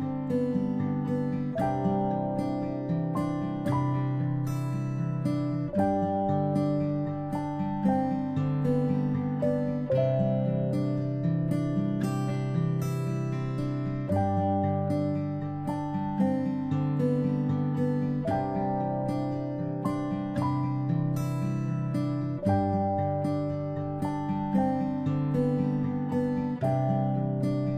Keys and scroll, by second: 11.7 space, 12.0-23.3 space, 23.5 space, 26.9 space, 27.2 space, 27.3 space.